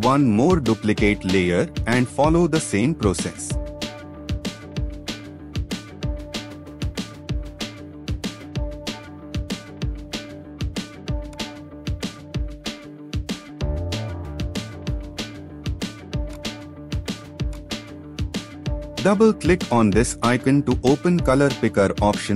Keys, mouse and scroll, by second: 5.7 ctrl+t, 12.1-12.8 scroll down 1, 12.8 scroll down 1, 13.1-13.7 alt+scroll up 2, 14.4-14.7 scroll down 1, 19.7 double click.